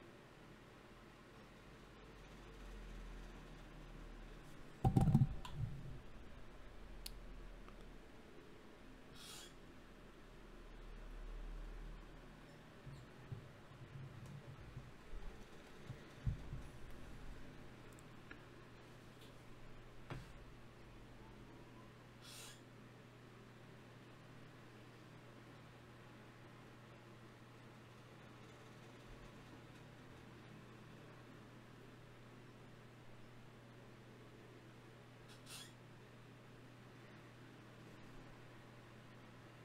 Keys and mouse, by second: 0.0-1.8 right drag, 0.8 f, 1.4 ctrl+Tab, 3.0 f, 3.4 f, 5.3 f, 6.2 KP_Decimal, 9.5 f, 12.3 click, 12.9 f, 13.7 f, 16.1 f, 16.5 f, 20.9-22.5 drag, 25.3 f, 25.9-27.6 drag, 28.3 f, 29.2 click, 31.3 ctrl+Tab, 32.3 right click, 33.5 g, 36.3 KP_Divide, 37.4 Tab.